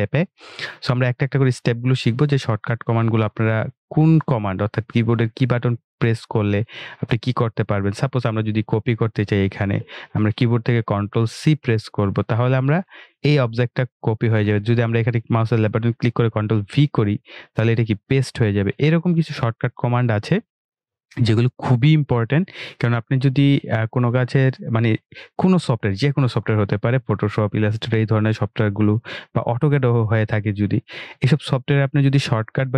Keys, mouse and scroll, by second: 8.7 click, 15.5 ctrl+Num_Lock, 15.5 click, 18.3 click, 22.2 Delete.